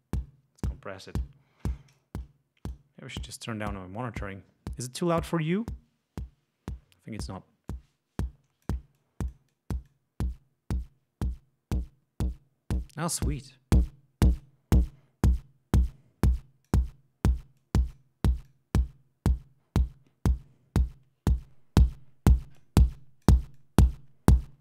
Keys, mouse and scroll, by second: 1.9-2.9 drag, 7.7-8.8 drag, 8.9-13.0 drag, 13.2-14.6 drag, 14.9-16.9 drag, 17.6 click, 18.5-21.0 drag, 21.4-22.8 drag, 22.9-23.4 drag, 23.6 click, 24.4-24.6 drag.